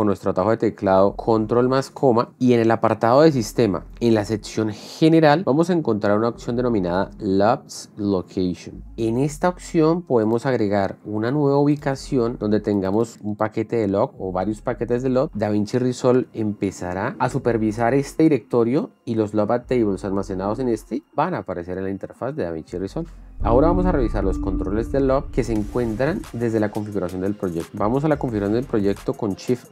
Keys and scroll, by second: 0.0 ctrl+,.